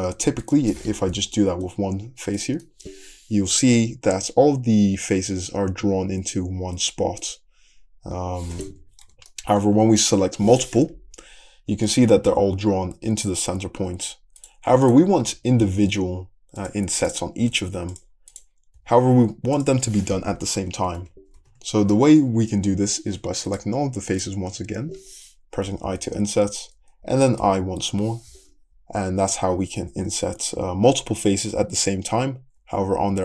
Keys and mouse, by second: 2.4 click, 2.6-7.5 middle drag, 3.7 i, 7.5-8.9 drag, 9.1 ctrl+z, 9.2 click, 10.2-14.1 drag, 11.1 i, 14.1 middle click, 14.9 click, 15.3-17.0 middle drag, 15.3 i, 17.0 click, 17.1-18.3 middle drag, 17.4 i, 18.3 click, 18.8-21.4 middle drag, 18.8 i, 20.6 ctrl+z, 20.8 ctrl+z, 21.0 ctrl+z, 21.4 ctrl+z, 22.3 ctrl+z, 23.5 shift+click, 25.7 i.